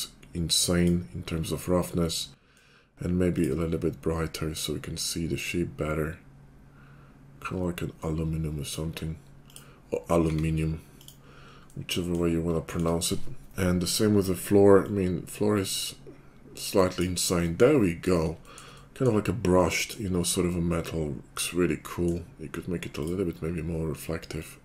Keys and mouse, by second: 3.5-15.0 drag, 10.1 s, 15.0-23.0 middle drag, 23.0-24.3 drag, 24.3-24.6 middle drag.